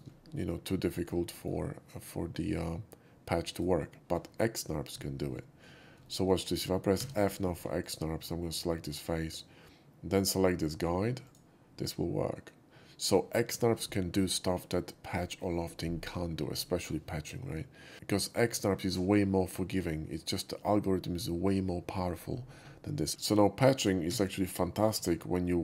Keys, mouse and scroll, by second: 0.1 scroll down 1, 0.4 shift+middle click, 1.3 shift+middle click, 3.5 shift+right click, 6.0 shift+middle click, 7.0 f, 7.8 click, 11.2 shift+click, 24.1 a, 24.9 x, 25.5 middle click.